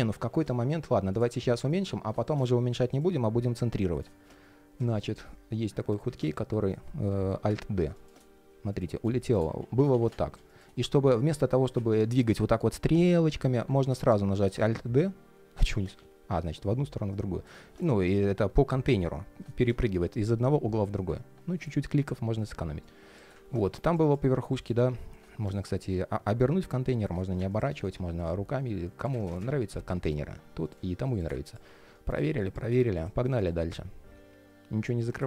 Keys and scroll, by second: 5.2 alt+s, 5.9 alt+a, 7.1 alt+d, 9.3 super+z, 13.5 super+z, 14.1 alt+d, 15.7 alt+a, 16.0 alt+d, 33.0 alt+l.